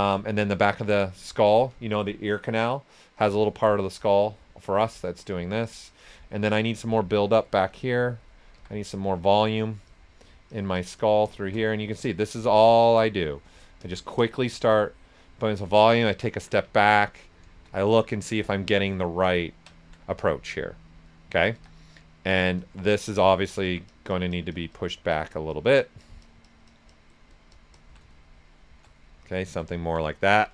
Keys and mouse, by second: 1.1 right click, 3.1-5.0 drag, 5.4 s, 5.5 click, 5.8 right click, 6.4 s, 6.4 click, 7.9 right click, 8.5 s, 9.4 right click, 9.8 click, 11.3-13.3 shift+drag, 14.6 shift+click, 15.3 right click, 17.8 alt+shift+right click, 19.4 ctrl+right click, 21.5-21.9 typing, 21.6 click, 22.3 right click, 22.6 ctrl+right click, 23.6 alt+click, 28.1 shift+click, 29.0 right click, 30.3 alt+right click.